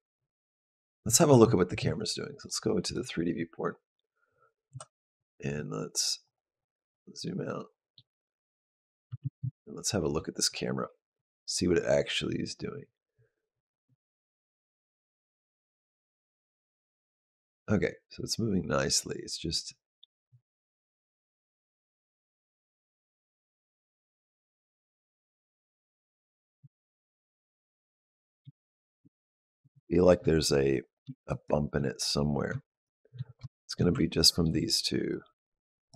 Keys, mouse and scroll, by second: 2.2 click, 4.5 KP_Decimal, 6.1-7.5 scroll down 6, 7.1 middle click, 8.9 space, 9.4 shift+middle click, 11.0 click, 25.2 click, 26.3 click, 26.6 shift+click, 26.7 shift+click, 27.0 click, 28.4 shift+middle click, 28.9 ctrl+middle click, 29.6 shift+middle click, 30.7 click, 31.1 shift+click, 31.9 click, 32.5 shift+click, 33.3 shift+middle click, 33.8 ctrl+middle click, 34.9 click.